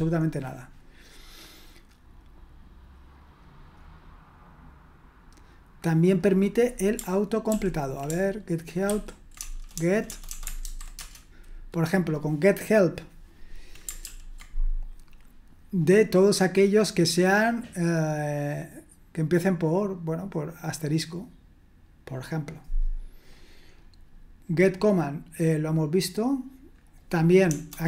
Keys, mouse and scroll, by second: 0.2-1.4 scroll down 1, 1.4-2.2 scroll down 1, 2.2-3.1 scroll down 1, 4.9-6.1 scroll down 1, 6.1 click, 7.5 ctrl+p, 8.9 ctrl+w, 9.4-10.6 typing, 10.9 Return, 14.0 ctrl+p, 23.2-24.5 scroll down 1, 24.5-25.6 scroll down 1, 25.6-26.8 scroll down 1, 26.8 click.